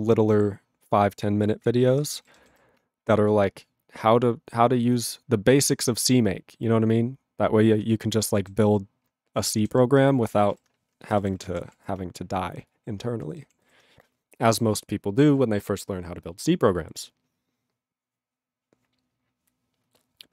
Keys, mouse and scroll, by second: 1.9 ctrl+p, 2.0 ctrl+n, 2.2 ctrl+p, 2.3 ctrl+n, 2.4 ctrl+p, 2.5 ctrl+n, 8.0 ctrl+p, 8.1 ctrl+n, 8.3 ctrl+p, 8.4 ctrl+n, 9.4 ctrl+p, 9.6 ctrl+n, 9.7 ctrl+p, 10.6 ctrl+n, 11.2 ctrl+p, 11.5 ctrl+n, 11.6 ctrl+p, 11.7 ctrl+n, 13.5 ctrl+p, 13.6 ctrl+n.